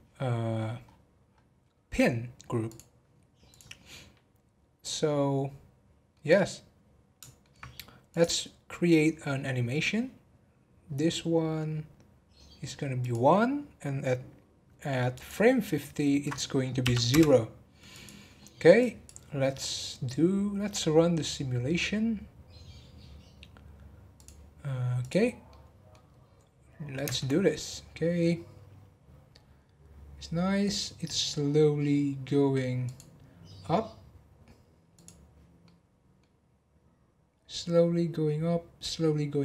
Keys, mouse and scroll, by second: 0.8-1.8 scroll down 15, 2.6-5.8 drag, 6.1-8.1 middle drag, 8.1 click, 9.2-9.6 scroll up 1, 12.1 scroll up 1, 13.0 click, 15.1-18.0 drag, 18.8-21.9 drag, 24.2 click, 25.0 click, 25.5-26.1 middle drag, 26.1-27.0 scroll up 1, 27.0 space, 36.5-39.4 middle drag.